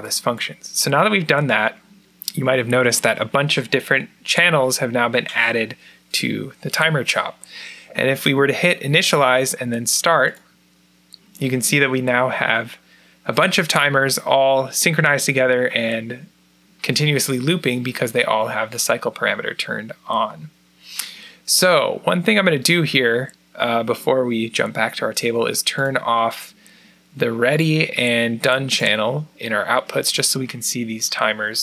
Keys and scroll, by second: 1.1 typing, 2.6 typing.